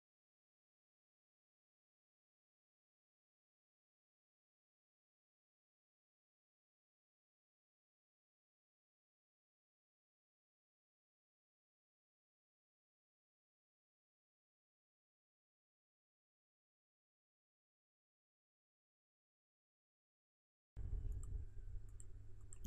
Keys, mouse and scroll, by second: 15.1 click.